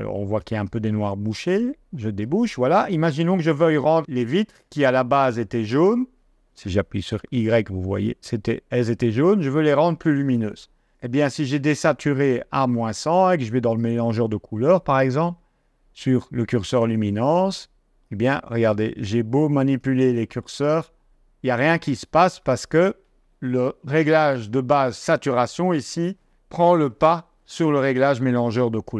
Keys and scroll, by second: 6.6 y, 9.2 y.